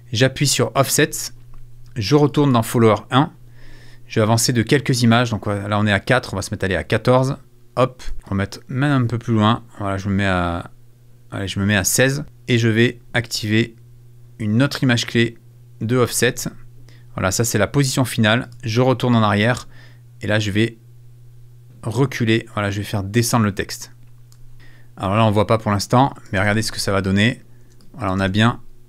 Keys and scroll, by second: 26.4 space, 27.6 space.